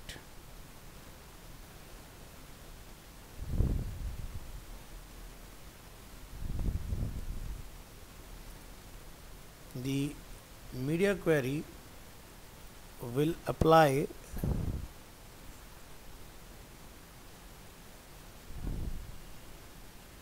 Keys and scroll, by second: 2.0 ctrl+s.